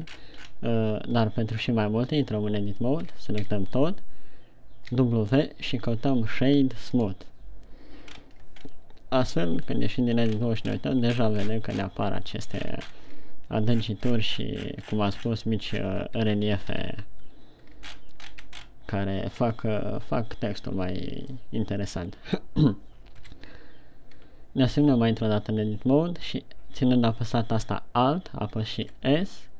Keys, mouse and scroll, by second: 0.6-1.2 scroll down 8, 1.6 Tab, 3.6 a, 4.0 a, 5.3 w, 8.5-8.9 ctrl+scroll up 3, 9.1 scroll down 2, 9.8 Tab, 11.1 scroll up 4, 11.8-12.8 ctrl+scroll up 14, 13.3 ctrl+scroll up 10, 14.2-15.7 ctrl+scroll down 22, 16.3 ctrl+scroll down 1, 17.2 shift+c, 18.3-19.2 shift+scroll up 10, 19.7 scroll down 1, 21.7 middle click, 23.7 KP_1, 24.7 Tab, 29.2 alt+s.